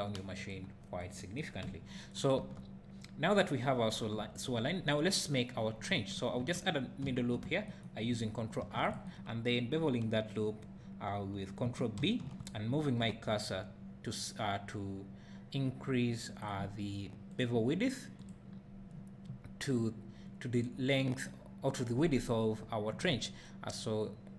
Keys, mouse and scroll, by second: 2.4 Tab, 7.0 ctrl+r, 7.8 right click, 8.6 ctrl+r, 9.1 right click, 12.0 ctrl+b, 16.5 click, 17.3 click, 18.2-24.3 drag.